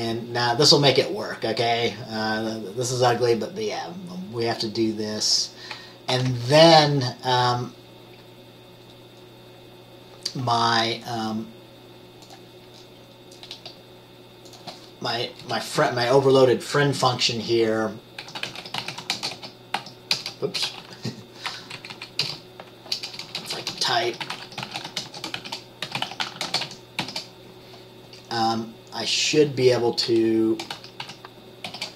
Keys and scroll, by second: 6.3 ctrl+s, 15.5 Return, 18.4-20.9 typing, 21.9 Right, 22.2 Right, 22.3-27.3 typing, 30.9-31.8 typing.